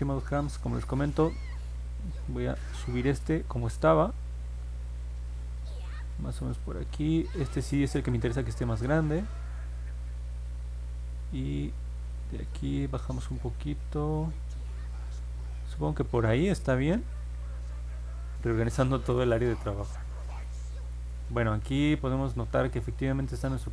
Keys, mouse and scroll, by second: 2.6-6.6 drag, 7.7-9.1 drag, 12.1-16.5 drag, 20.4-22.5 alt+drag.